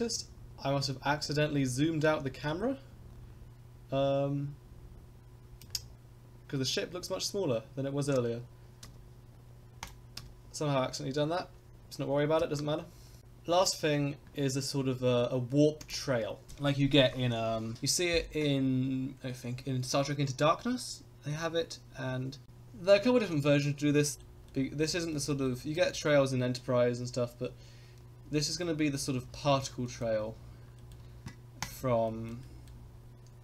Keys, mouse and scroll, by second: 8.8 n, 9.8 click, 10.1 n, 12.4 ctrl+s, 15.8 click, 24.1 shift+middle click, 24.4 middle click, 25.1 shift+middle click, 25.4 middle click, 28.6 middle click, 29.3 shift+middle click, 29.8 middle click, 30.2 scroll up 1, 30.7 shift+middle click, 31.6 click, 32.1 shift+middle click, 32.4 middle drag.